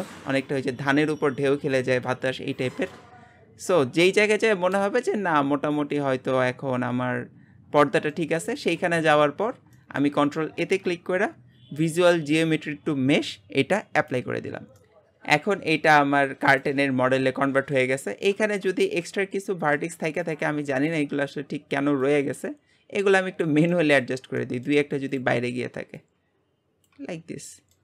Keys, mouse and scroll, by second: 4.9 space, 5.1-8.1 middle drag, 8.4-9.5 shift+middle drag, 9.5 scroll up 1, 9.8-14.2 shift+middle drag, 14.8-15.8 middle drag, 15.8 g, 17.2-18.5 middle drag, 18.5 scroll up 2, 18.8 shift+middle click, 19.2-19.7 scroll up 2, 19.7 Tab, 20.3 click, 20.7 shift+middle click, 21.1 scroll up 1, 22.2 click, 23.7-25.2 middle drag, 25.2 click, 26.1 click, 27.0 Tab, 27.1 scroll down 1, 27.4 middle click.